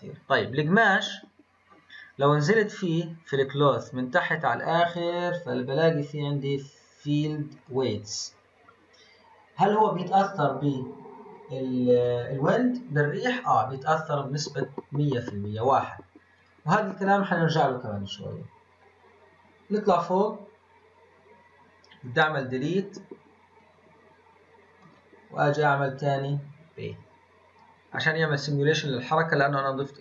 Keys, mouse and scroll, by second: 0.2 click, 2.6-4.1 drag, 4.1-6.9 scroll down 31, 6.9-7.5 scroll down 1, 7.5-8.3 drag, 8.3-11.7 scroll down 10, 16.3 click, 16.9-17.6 scroll up 2, 18.1-18.8 scroll up 2, 18.9-19.9 scroll up 6, 19.9-20.5 scroll down 2, 20.5-20.9 scroll down 2, 20.9-21.3 scroll up 1, 22.5-30.0 drag.